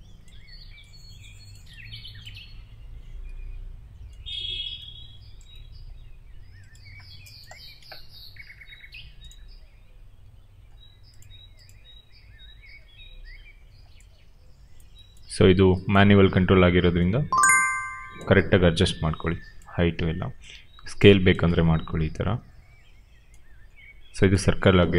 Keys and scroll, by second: 2.9 w, 7.9 r, 16.0 w, 19.9 r, 24.7 w.